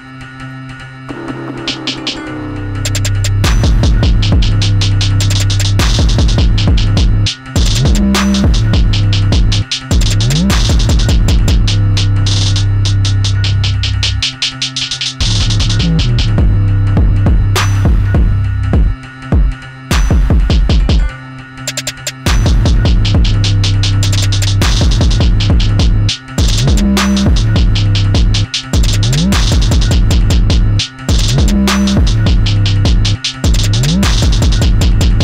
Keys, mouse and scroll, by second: 5.8 click, 8.9 click, 12.5 click, 13.2-14.0 scroll down 1, 16.9 click, 18.9-19.8 scroll down 1, 19.8 click, 21.7-22.4 scroll down 1, 22.4 click, 25.9 click, 33.6-35.2 drag.